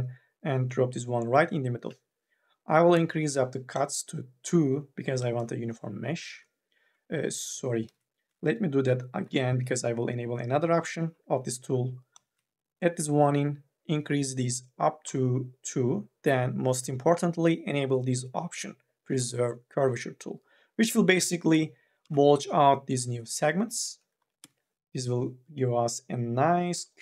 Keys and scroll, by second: 5.0 3, 5.2 e, 7.3 ctrl+z, 9.0 k, 9.4 l, 22.1 2, 22.1 e, 24.0 3, 24.4 e.